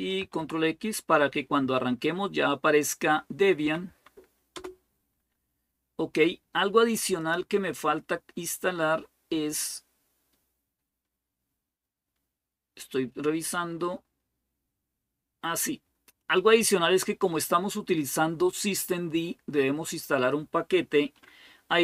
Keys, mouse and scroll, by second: 0.0 ctrl+x, 3.4 Up, 3.7 Up, 4.3 Return, 7.0 click, 7.8-8.7 scroll down 1, 9.6-11.2 scroll down 1, 11.2-12.0 scroll down 1, 12.0-15.4 scroll down 1, 16.0-18.7 drag.